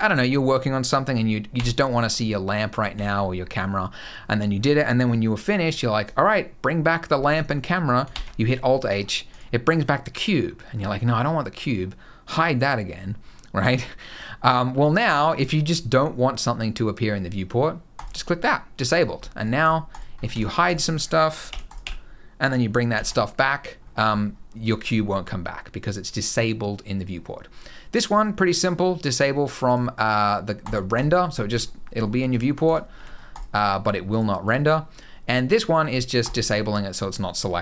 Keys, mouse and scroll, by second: 1.3 h, 1.6 middle click, 1.9 scroll down 3, 2.5 click, 2.7 h, 2.9-4.3 scroll up 6, 5.2 scroll down 1, 7.1-7.8 scroll down 2, 7.8 alt+h, 8.6 scroll down 2, 9.0 click, 10.1-10.8 scroll up 4, 11.0 middle click, 11.5 scroll up 1, 17.7 click, 18.7 scroll down 4, 19.0 middle click, 19.4 click, 19.6 click, 19.9 scroll down 2, 20.0 g, 21.2 h, 21.4 click, 21.6 h, 22.7 alt+h, 23.6-24.2 scroll up 5, 29.4 click, 30.4 click, 30.7 click, 31.6 middle click, 32.0 click, 32.4 click, 32.7 g, 33.8 click, 34.2 click, 36.0 click.